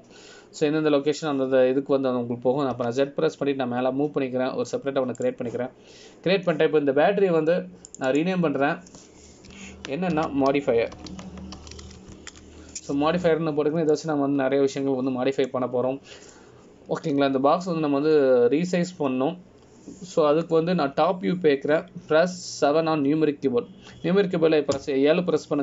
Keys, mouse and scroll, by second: 7.9-10.0 scroll up 1, 10.0 click, 10.2 click, 16.1 middle click.